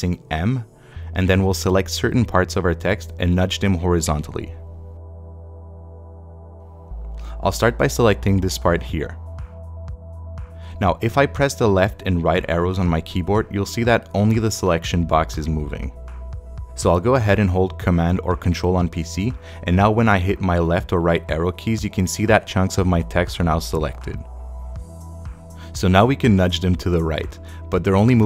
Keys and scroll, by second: 2.4 space, 3.7 space, 11.3 Right, 11.5 Left, 13.0 Right, 18.2 super+Left, 20.8 Left, 21.8 Right, 22.9 Left, 23.6 Right.